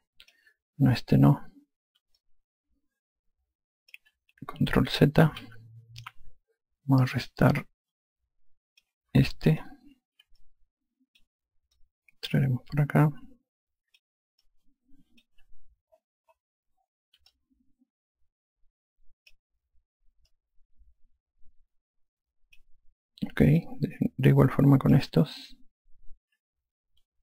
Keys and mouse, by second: 3.2 alt+click, 6.3 ctrl+z, 8.6 alt+click, 10.3 click, 11.4 click, 12.8 click, 15.5 click, 18.3 alt+click, 21.4 click, 24.6 alt+click.